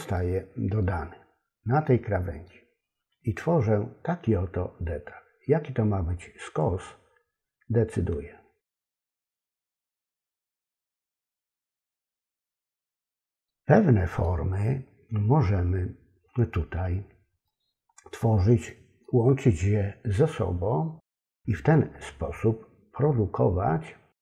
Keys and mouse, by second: 0.1 middle click, 1.9 middle click, 6.7-12.2 drag, 13.4 middle click, 17.5-18.7 middle drag, 19.0-21.6 middle drag, 23.4-24.2 middle drag.